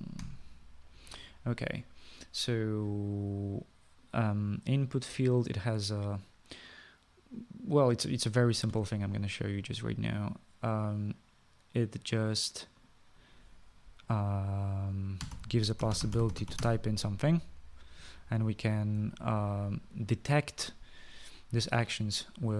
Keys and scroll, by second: 1.2 3, 16.0-22.5 typing.